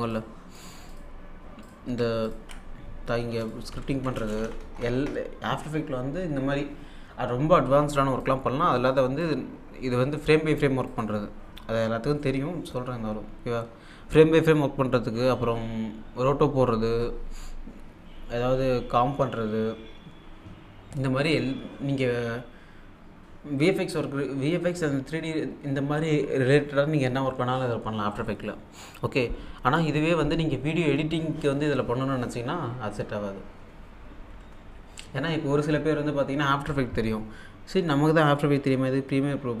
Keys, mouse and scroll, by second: 3.7-4.4 typing, 8.2-10.4 drag, 10.9 click.